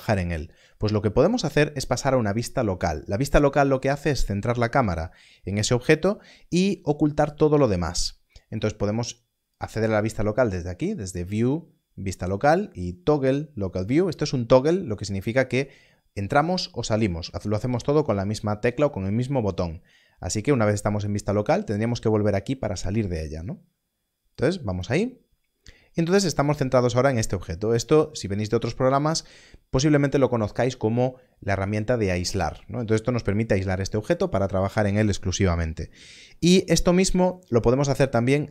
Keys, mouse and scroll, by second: 9.5-11.5 scroll up 1, 24.4 click.